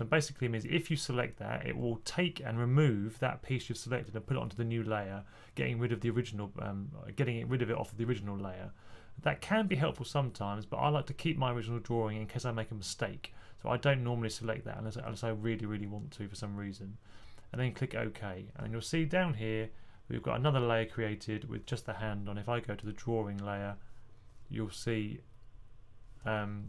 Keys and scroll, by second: 26.5 typing.